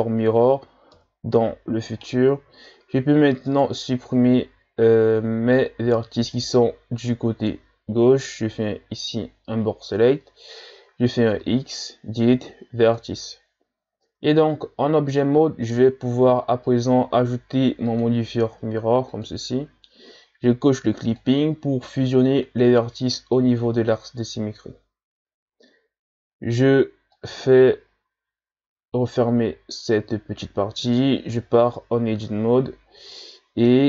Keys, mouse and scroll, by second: 1.0 KP_1, 2.0-2.9 shift+scroll up 2, 3.5 right click, 4.0 z, 5.8 b, 11.4 x, 14.0 Tab, 16.7 click, 19.2-21.2 drag, 27.1-30.1 drag, 31.3 Tab, 32.2 z, 33.2-33.8 middle drag.